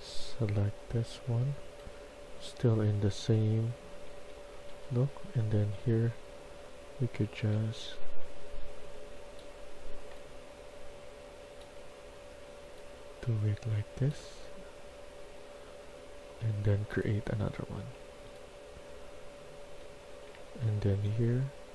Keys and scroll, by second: 1.8-7.9 typing, 11.5-12.7 typing, 18.2-20.7 typing.